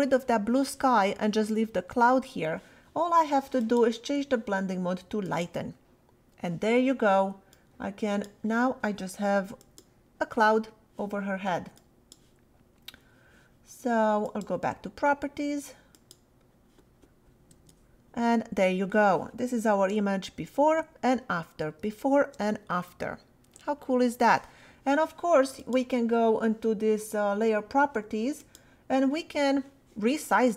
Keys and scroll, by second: 17.5 Return, 20.0 \, 21.8 \.